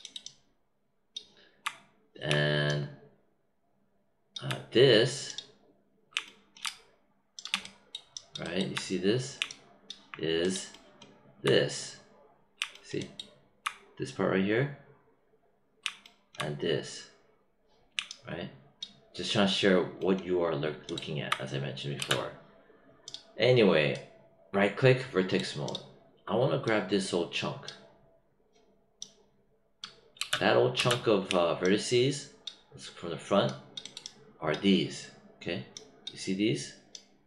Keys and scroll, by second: 21.9 space, 30.1 space.